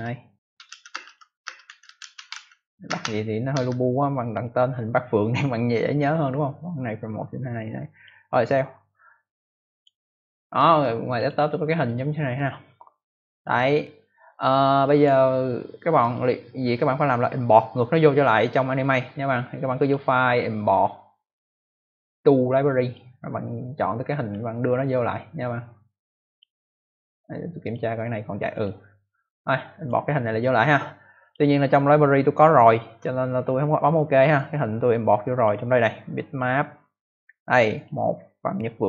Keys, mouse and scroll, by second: 0.0-3.5 typing, 7.8 click, 9.6 click, 11.0 click, 11.2 click, 11.3 double click, 14.8 click, 15.9 click, 19.7 click, 22.7 click, 24.7 scroll up 2, 25.6-26.0 scroll down 1, 26.2 click, 27.5 click, 28.5 click, 29.7 click, 31.1 click, 34.3 click, 36.2 click, 37.7 click.